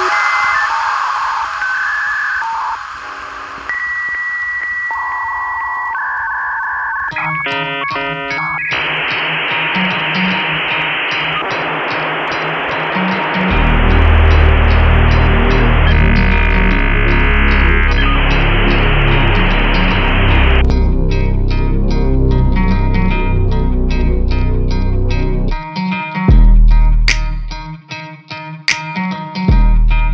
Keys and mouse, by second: 1.2-2.6 drag, 2.6-4.2 middle drag, 5.4 middle click, 8.0 n, 8.6 shift+middle click, 9.6 shift+middle click, 10.0 middle click, 12.4-14.6 drag, 16.4-19.0 drag, 19.4-20.5 middle drag, 20.8 shift+middle click, 21.4-22.6 middle drag, 22.8 shift+middle click, 23.2 middle click, 24.4 shift+middle click, 25.5 Tab, 26.0 Tab, 26.9-27.3 middle drag, 28.1-29.0 drag, 29.4 shift+middle click.